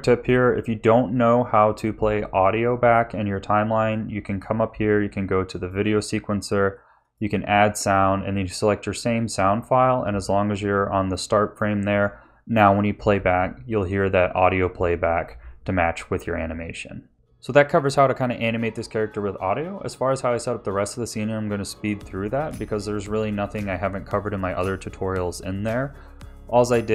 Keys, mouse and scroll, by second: 4.2 click, 7.0 click, 9.4 click, 11.0 click, 17.3 Tab, 17.3-24.1 typing, 17.5 Tab, 17.7 scroll up 2, 17.9 click, 17.9 click, 18.5 click, 18.9 ctrl+z, 18.9 middle click, 19.1 click, 19.5 click, 19.8 click, 20.1 Tab, 20.3 click, 20.6 click, 21.0 middle click, 21.0 ctrl+s, 21.2 ctrl+z, 21.4 Tab, 22.0 click, 22.2 ctrl+s, 22.4 scroll down 2, 22.6 click, 22.9 click, 23.4 ctrl+s, 23.4 click, 24.0 click, 24.3 ctrl+s, 24.3 click, 24.4 click, 24.5 click, 24.7 click, 24.8 click, 25.0 click, 25.7 r, 25.9 click, 26.1 click, 26.3 click, 26.6 ctrl+s, 26.6 click, 26.8 z.